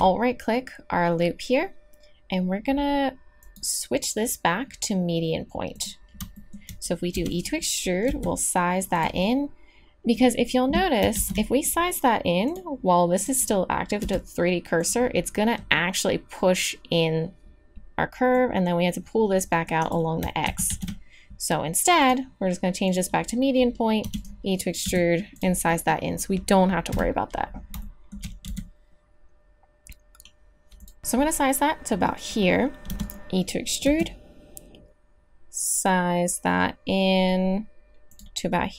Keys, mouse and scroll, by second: 5.3 click, 7.1 e, 8.0 s, 11.1 ctrl+z, 14.0 s, 18.3-20.2 drag, 20.4 ctrl+z, 20.7 ctrl+z, 22.9 ctrl+z, 24.0 e, 24.8 s, 26.9 KP_3, 27.8 middle click, 28.4 s, 32.9 e, 33.8 s.